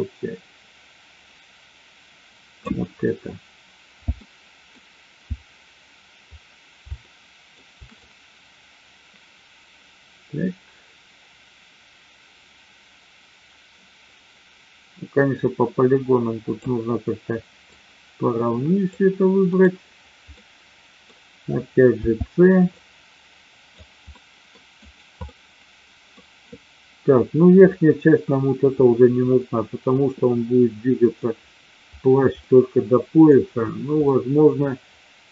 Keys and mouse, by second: 4.2 alt+middle click, 6.9 shift+middle click, 7.9 click, 17.7 click, 19.5 right click, 20.3 middle click, 21.9 c, 24.2 middle click, 24.7 right click, 25.3 middle click, 27.7 middle click, 30.2-31.2 middle drag, 32.5 middle click, 34.1 middle click.